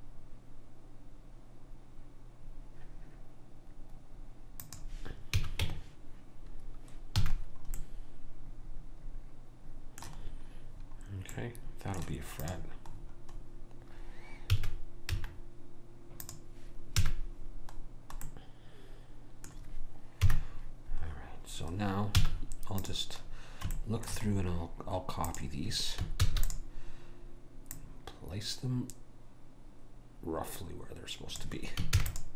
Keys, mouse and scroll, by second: 5.4 a, 5.7 Tab, 7.3 a, 11.4-13.4 middle drag, 12.5 click, 14.5 s, 17.0 a, 20.2 KP_1, 22.2 z, 25.3 click, 26.2 shift+d, 27.7 click, 32.0 shift+d.